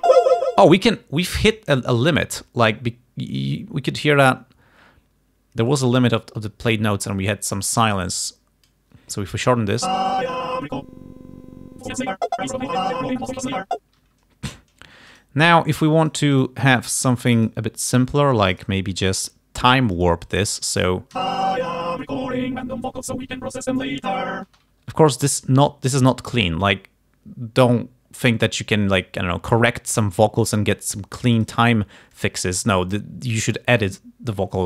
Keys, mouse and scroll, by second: 0.3 space, 5.7-9.0 drag, 9.9 space, 14.1 space, 15.2 shift+right click, 16.1 shift+right click, 16.4 shift+scroll, 17.4 shift+scroll, 18.5-18.9 shift+scroll, 19.1 shift+scroll, 20.0 shift+scroll, 21.2 shift+space, 24.6 space, 24.8 d, 25.4 click, 26.5 click, 28.3 click, 30.5 alt+click, 31.4 shift+right click, 32.3-33.8 alt+drag.